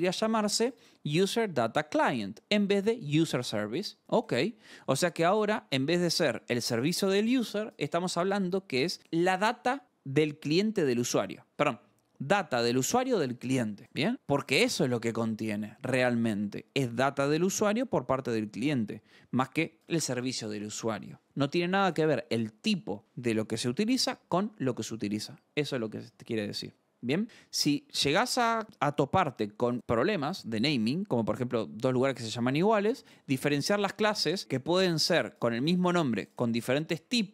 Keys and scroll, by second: 27.2-28.2 scroll, 28.4-29.7 scroll.